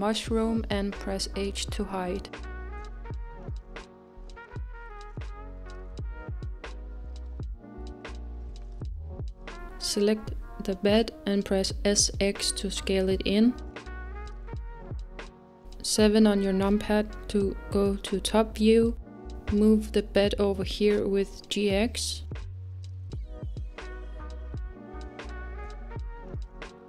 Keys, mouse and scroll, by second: 4.6 scroll up 2, 5.4-8.4 middle drag, 9.1 click, 9.6-12.3 middle drag, 12.3 s, 16.7 s, 16.7 KP_7, 18.4-20.0 scroll up 2, 20.0 g, 24.3-24.6 scroll down 2, 24.3 g, 25.1-26.8 middle drag.